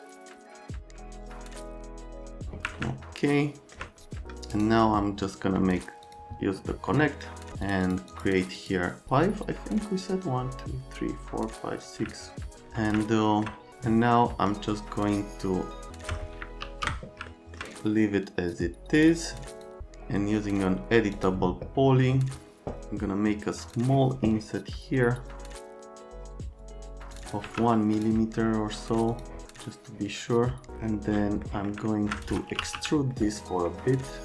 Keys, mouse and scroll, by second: 0.2 alt+click, 0.6 alt+click, 1.1 alt+click, 1.6 alt+click, 2.1 alt+click, 2.9 alt+right click, 4.5 right click, 6.0 click, 7.0 middle click, 7.3 middle click, 7.6 click, 7.8 click, 8.1 click, 8.5 click, 9.6 right click, 12.1 alt+right click, 13.0 alt+middle click, 15.9 alt+middle click, 16.6 ctrl+z, 17.3 alt+right click, 19.0 click, 19.5 click, 21.1 click, 23.6 click, 26.6 middle click, 27.1 middle click, 27.2 middle click, 27.4 `, 27.9 click, 29.1 click, 31.4 right click, 31.9 alt+middle click, 32.3-33.2 typing, 33.1 middle click.